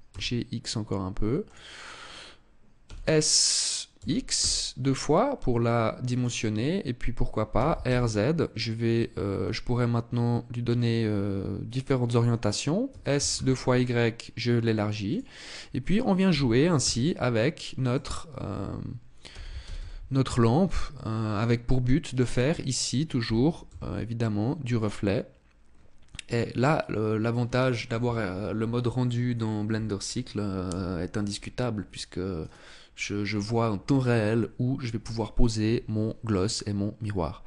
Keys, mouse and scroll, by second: 1.2 click, 2.4 s, 5.8 click, 7.1 r, 11.8 click, 12.4 s, 14.7 click, 15.8 g, 17.6 click, 18.8 r, 21.0 click, 22.9 g, 24.5 click, 32.0 right click, 37.0 g.